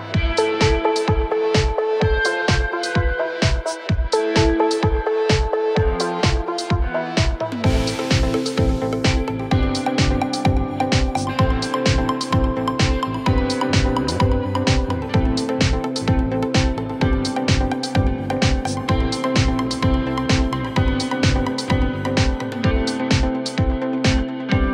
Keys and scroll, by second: 0.0-3.1 typing, 4.2-6.5 typing, 11.4-12.1 typing, 13.6 Return, 16.4 ctrl+z, 16.8-19.3 typing, 19.5 Right, 20.6-21.3 typing, 24.3 Right.